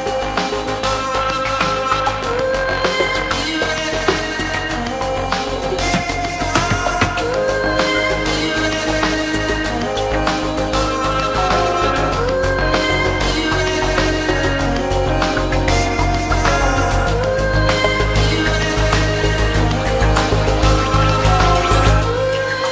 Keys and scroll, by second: 8.2-9.6 typing, 9.9 Return, 21.0 2, 21.5 4, 21.9 Return.